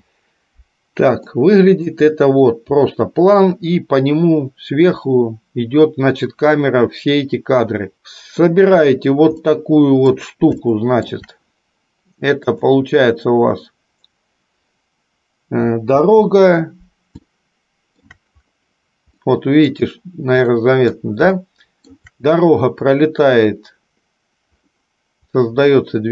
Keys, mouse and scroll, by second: 0.1 space, 1.4 middle click, 8.0 middle click, 9.5 middle click, 10.8 shift+middle click, 13.3-14.7 drag, 16.2 space, 17.5 middle click, 19.5 middle click, 20.7 middle click, 21.7 shift+middle click.